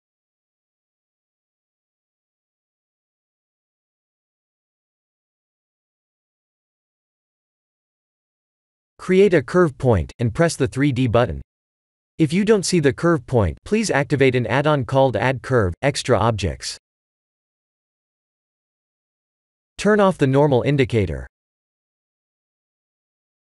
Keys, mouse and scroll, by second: 0.8 Tab, 1.3 scroll down 3, 1.8 middle click, 2.7-3.8 scroll down 2, 4.7 middle click, 7.0 KP_1, 7.4 KP_7, 8.5 click, 9.5 shift+a, 16.2 click, 17.4 click, 19.4 click, 22.8 Tab.